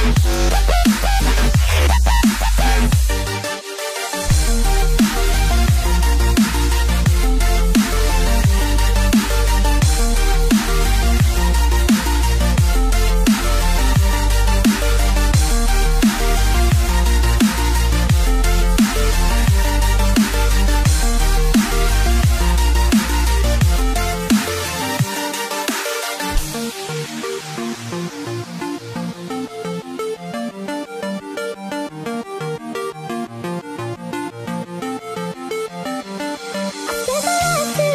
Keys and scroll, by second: 35.2 space, 36.0 space, 36.8 space.